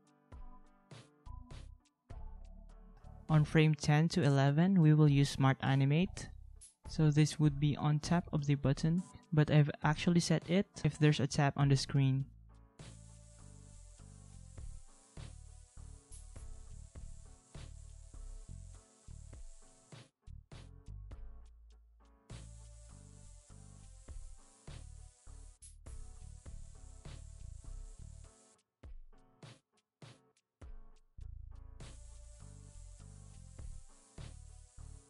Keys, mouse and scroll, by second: 2.3 ctrl+a, 4.6 ctrl+a, 25.2 ctrl+a, 30.2 ctrl+x, 30.5 ctrl+v, 33.4 ctrl+a.